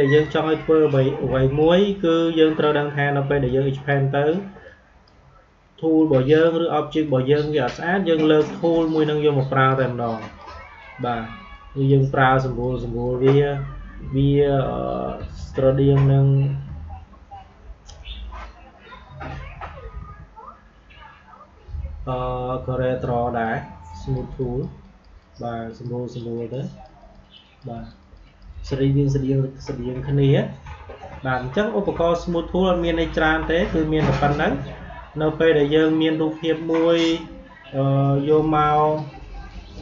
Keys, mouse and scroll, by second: 22.9 click, 36.3 click.